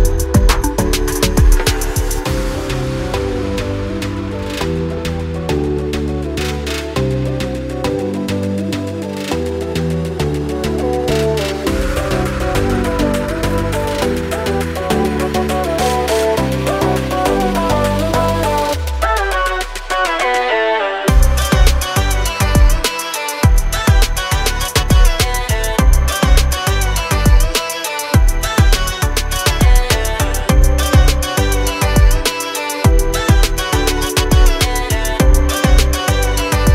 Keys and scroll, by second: 6.5 p, 14.6 space, 14.8 Escape, 18.8 m, 20.1-21.7 typing, 27.5 space, 28.5 Delete, 29.4 Delete, 32.5 p, 33.4 1, 33.7 0, 33.9 Return.